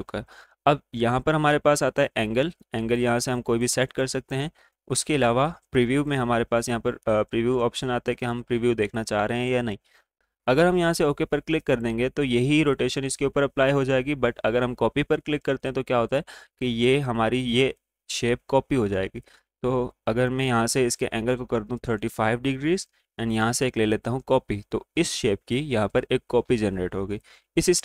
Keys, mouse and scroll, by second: 1.6-3.4 drag, 1.6-2.6 typing, 8.2 click, 20.2 click, 21.5 Tab, 23.3 click.